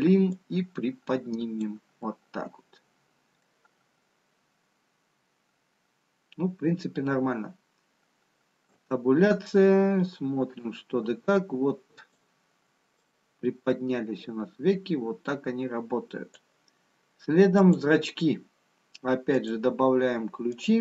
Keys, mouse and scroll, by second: 1.3 click, 3.5 middle click, 8.8 Tab, 10.8 click, 18.0 click, 19.3 click.